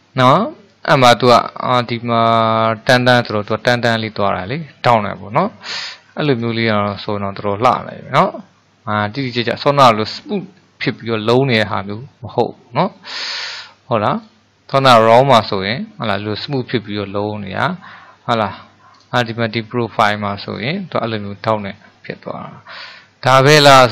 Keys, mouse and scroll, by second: 5.6 middle click, 6.6 drag, 6.9 scroll up 1, 7.1-8.6 scroll down 4, 8.6 middle click, 9.3-9.8 scroll up 4, 9.8-14.2 middle drag, 14.2 click, 16.8-19.0 middle drag, 19.0 click, 21.2-23.9 middle drag.